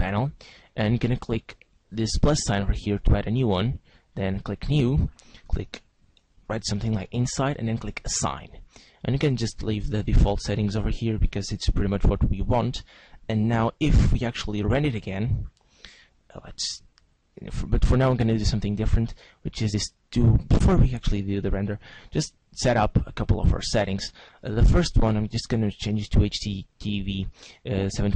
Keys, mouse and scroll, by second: 0.4 click, 2.2 click, 4.4 click, 4.9 click, 8.0 click, 11.8 Tab, 13.4 z, 14.8 click, 19.8 click, 25.1 click.